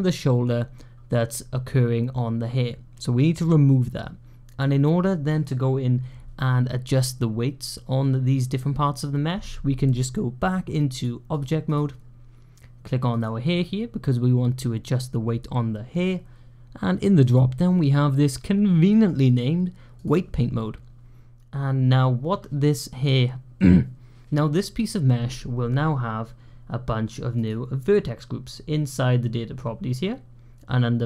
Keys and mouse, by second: 10.9 click, 13.0 click, 17.2-19.9 drag, 27.2 click.